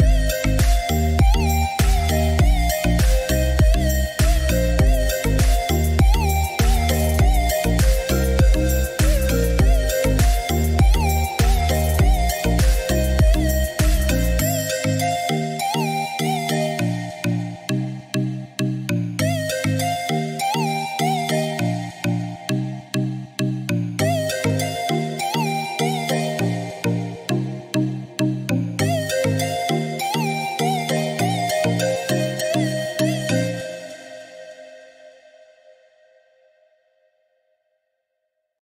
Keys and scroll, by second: 7.6 8, 7.9 Return.